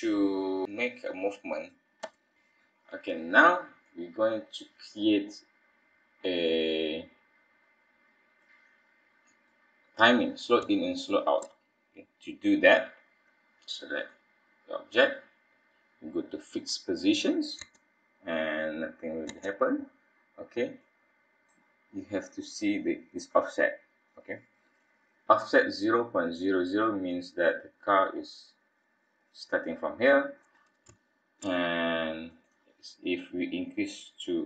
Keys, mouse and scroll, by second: 2.0 KP_1, 2.3 middle click, 2.5 scroll up 1, 3.9 middle click, 8.5 click, 9.7-10.1 scroll up 2, 10.7 shift+middle click, 14.0 click, 16.6 click, 17.6 space, 19.3 space, 20.8 click, 29.9 scroll down 2, 31.0 shift+middle click, 32.3 click.